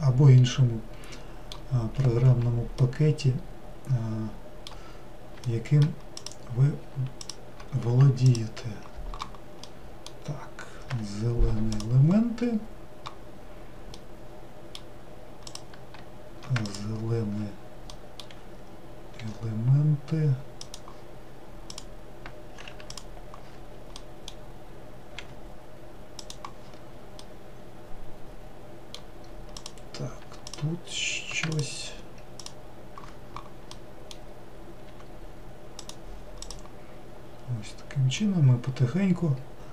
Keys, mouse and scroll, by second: 6.4 click, 11.0 g, 14.3-15.7 middle drag, 15.7 click, 19.3 g, 21.9 click, 25.3 g, 27.5-29.8 middle drag, 29.8 click, 32.6 alt+click, 35.0 g, 36.6 click, 37.1-37.9 scroll down 2, 38.4-39.7 middle drag.